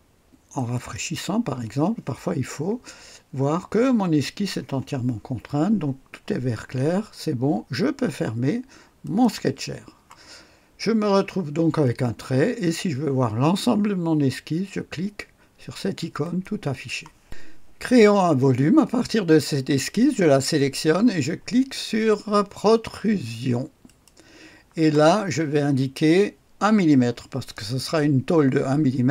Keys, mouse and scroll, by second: 0.5 click, 9.0 click, 16.1 click, 20.5 click, 23.8 click, 27.0 KP_1.